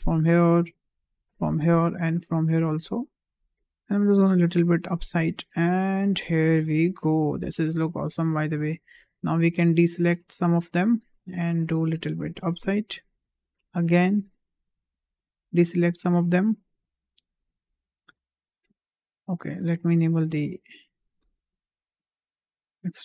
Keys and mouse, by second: 0.9 shift+click, 2.0 shift+click, 4.0-6.1 drag, 7.0 shift+middle click, 7.6-8.6 middle drag, 9.6 ctrl+click, 11.1-12.9 drag, 13.6 ctrl+click, 15.0 ctrl+click, 15.9 shift+click, 17.1 ctrl+click, 18.3 shift+click, 20.8 ctrl+click, 21.9-22.9 drag.